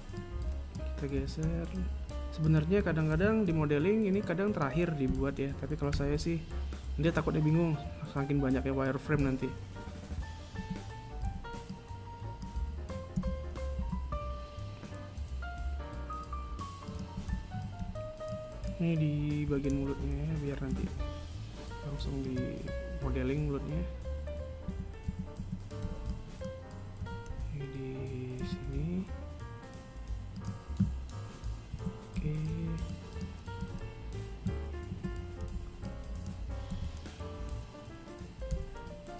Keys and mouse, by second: 0.2 b, 1.6 g, 3.2 a, 3.9 b, 9.5 KP_1, 10.9 a, 17.6 a, 25.0 a, 25.4 a, 26.2 b, 32.1 a, 32.5 v, 32.8 b, 33.9 KP_3, 35.2 a.